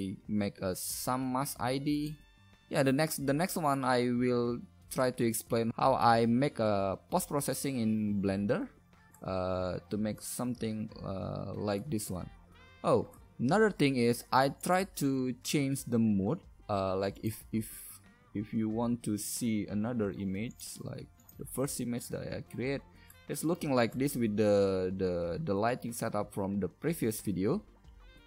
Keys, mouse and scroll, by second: 19.1 right click, 21.8-22.9 right drag, 22.9-28.2 middle drag.